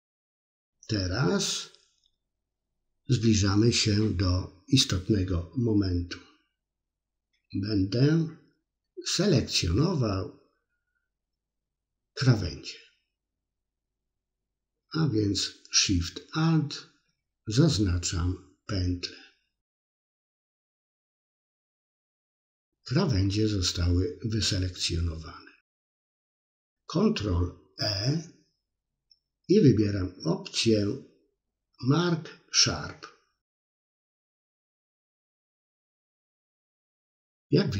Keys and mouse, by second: 5.7 click, 10.8-13.3 middle drag, 16.2 alt+shift+click, 17.3-22.8 middle drag, 26.1 ctrl+e, 33.5 middle click, 35.1 middle click.